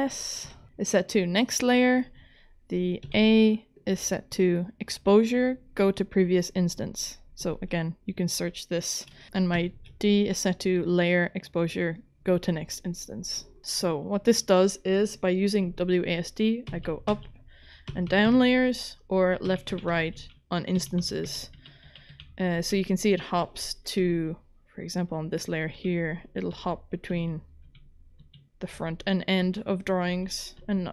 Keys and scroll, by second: 0.4 s, 3.0 a, 9.6 d, 16.7-18.3 typing, 19.4-24.0 typing, 25.8-30.9 typing.